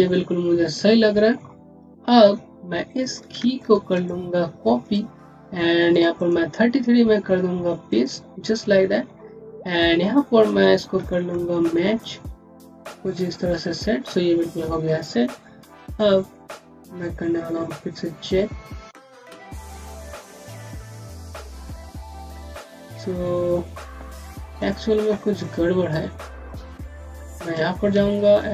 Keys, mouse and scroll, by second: 0.3 scroll down 1, 1.7 click, 3.4 shift+click, 4.8 click, 6.0 right click, 7.7 click, 10.5 scroll up 1, 11.0 middle click, 11.9 click, 13.6 scroll down 1, 15.8 typing, 18.5 typing, 20.2-21.5 typing, 22.7 typing, 24.4 click, 28.2 shift+click.